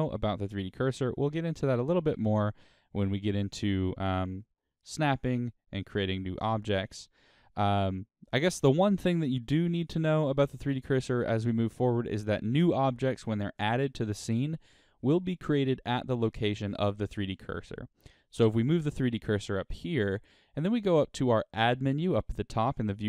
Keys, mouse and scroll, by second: 2.6-3.7 middle drag, 3.7-4.6 scroll up 3, 4.6-6.2 shift+middle drag, 6.2-6.8 scroll down 2, 6.8-10.8 shift+middle drag, 16.8 shift+right click, 19.9-20.9 right drag.